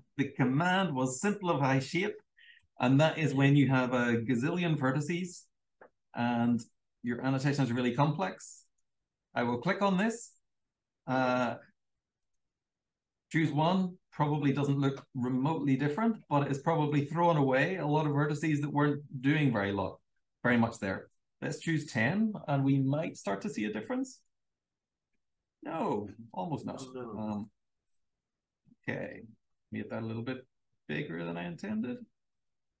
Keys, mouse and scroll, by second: 0.0-0.6 typing, 1.8 Down, 2.5 \, 3.8 BackSpace, 4.9 Down, 8.4 click, 12.2 click, 14.2 super+l, 16.7 click, 16.8 click, 20.4 1, 23.9 click, 25.3-26.4 scroll up 2, 31.2-31.6 scroll up 1, 32.7-32.8 typing.